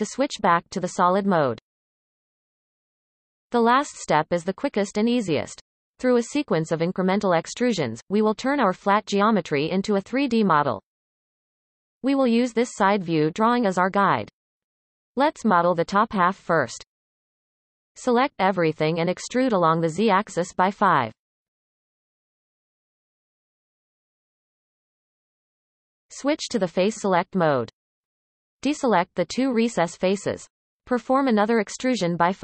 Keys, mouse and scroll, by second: 15.8-16.7 shift+middle drag, 16.7 Tab, 17.7 a, 19.4-20.4 shift+middle drag, 20.4 e, 25.2-26.4 scroll up 1, 26.6 click, 27.8 shift+click, 28.5 shift+click, 30.3 e.